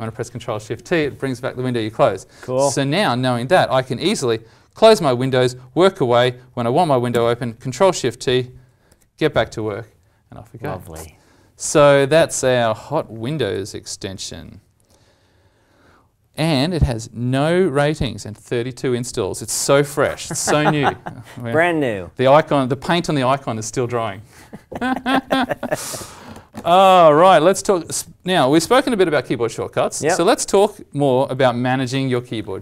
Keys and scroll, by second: 7.1 ctrl+shift+t, 13.5 alt+Tab.